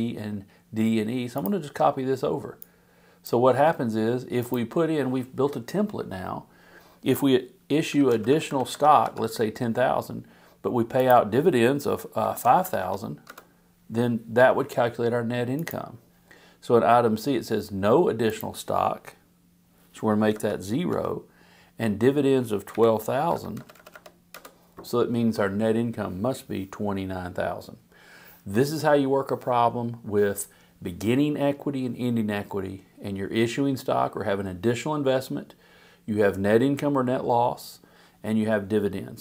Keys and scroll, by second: 7.6-8.6 typing, 9.0 Home, 12.0-12.9 typing, 13.2 Return, 20.3 0, 20.9 Return, 22.7 Down, 22.9-24.1 typing, 24.3 Return.